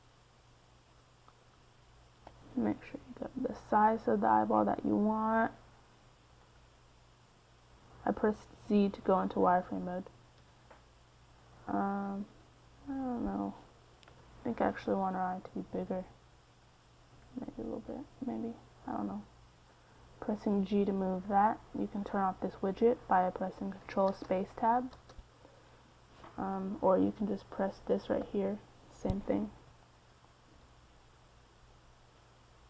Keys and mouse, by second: 2.5 s, 3.7 g, 4.9 middle click, 5.3 KP_1, 6.3 g, 8.1 z, 10.0 g, 12.0 KP_3, 14.3 z, 14.8 s, 16.4 g, 18.1 middle click, 20.6 ctrl+space, 21.5 ctrl+space, 21.5 middle click, 24.4 KP_1, 24.8 z, 30.4-32.6 middle drag.